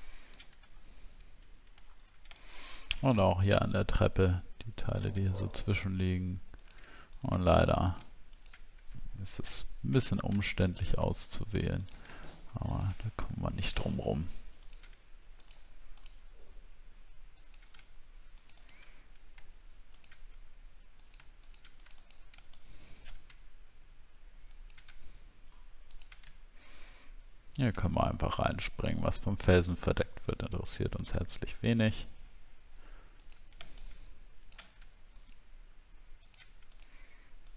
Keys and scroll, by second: 0.7 alt+scroll up 1, 1.8 alt+scroll up 1.